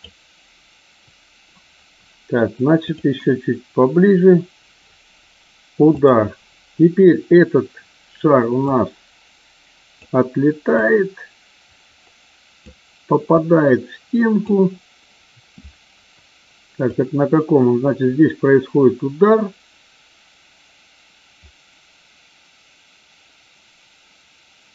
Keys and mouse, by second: 8.7-9.9 drag, 10.9-12.6 drag, 13.3-14.4 drag, 16.8-24.7 drag.